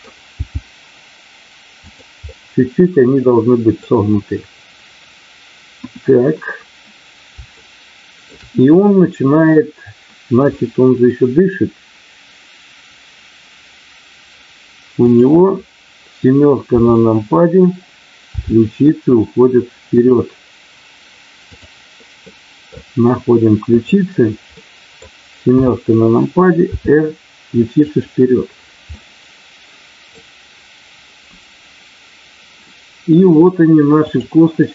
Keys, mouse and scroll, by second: 0.3 g, 1.8 click, 2.3-3.0 scroll up 1, 3.0 middle click, 5.6 KP_1, 7.6 shift+middle click, 10.6 middle click, 16.7 KP_7, 18.3 r, 19.9 click, 21.4 click, 22.2 middle click, 23.7 click, 24.5 middle click, 25.4 KP_7, 26.7 r, 28.9-30.2 middle drag, 34.0 click.